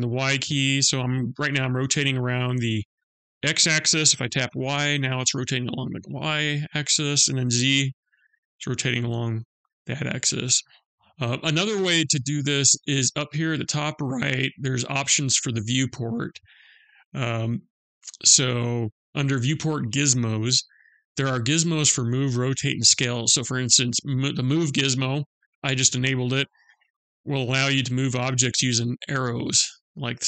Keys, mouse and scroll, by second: 16.6 click, 18.0 click, 27.2 click, 29.5 click.